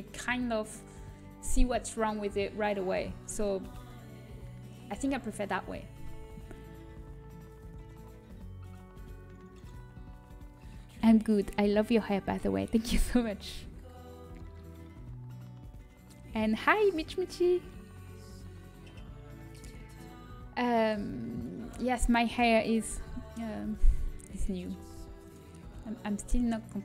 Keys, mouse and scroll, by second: 0.6-3.0 middle drag, 3.0 KP_1, 6.5 middle click, 21.5-24.9 middle drag, 24.9 e.